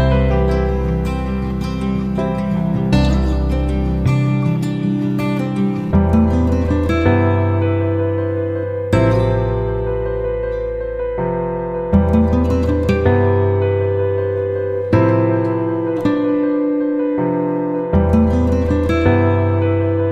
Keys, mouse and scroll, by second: 0.5 shift+click, 1.3 shift+Delete, 2.1 click, 3.1 F9, 3.9-8.9 drag, 9.0 shift+click, 13.4 click, 14.2 shift+click, 19.1 F9, 19.9-20.1 drag.